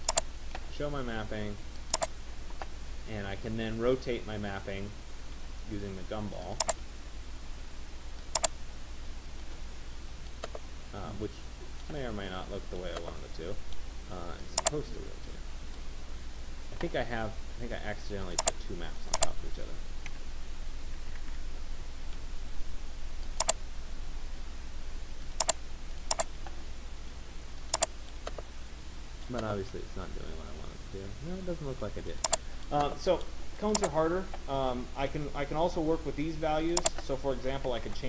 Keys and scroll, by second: 21.3 ctrl+z, 37.3 9.